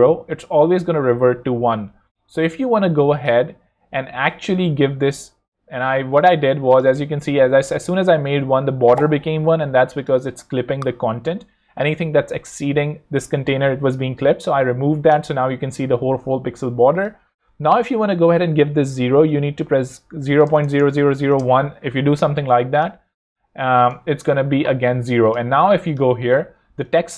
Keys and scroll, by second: 5.4 super+z, 6.5 z, 19.1 0, 19.8 ., 20.4 0, 21.1 1, 21.3 Return, 25.8 z.